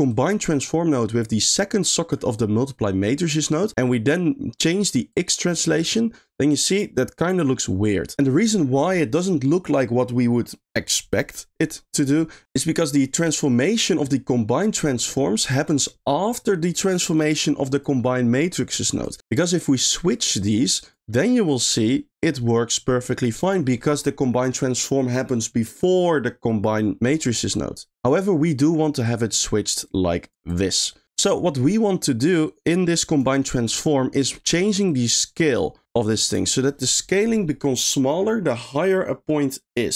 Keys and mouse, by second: 0.1-2.1 drag, 3.5 middle click, 5.2-8.1 drag, 15.4 middle click, 17.1 click, 19.0 click, 19.5 click, 19.6-20.1 drag, 20.5-20.9 drag, 21.1 middle click, 21.7-23.2 drag, 27.3 middle click, 29.0-29.4 drag, 29.8 click, 31.0 middle click, 31.2 middle click, 31.7 middle click, 32.3 click, 33.4 middle click, 33.9 middle click, 34.8-36.3 drag.